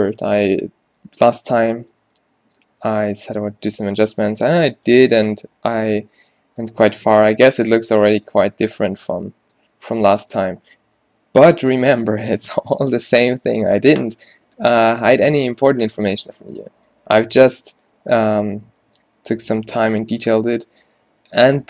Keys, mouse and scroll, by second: 20.1-21.6 middle drag.